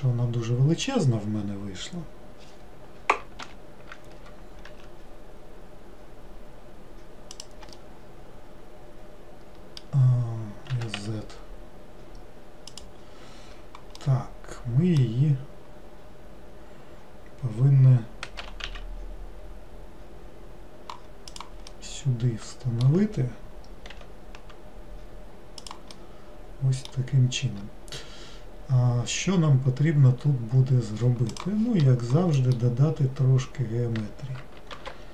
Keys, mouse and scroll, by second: 7.9-10.8 middle drag, 10.8 s, 14.1-17.2 middle drag, 21.8-24.1 middle drag, 24.1 r, 26.1-28.3 middle drag, 28.3-31.8 scroll up 2, 32.5-34.9 middle drag, 34.9 ctrl+r.